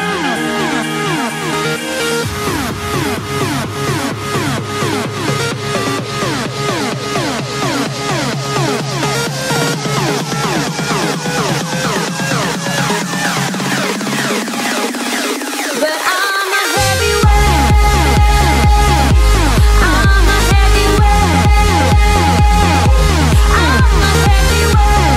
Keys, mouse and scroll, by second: 1.8-9.3 drag, 9.3-12.9 middle drag, 13.1-16.7 drag, 18.0-20.6 drag, 20.6-21.1 scroll down 2, 21.1-24.8 middle drag.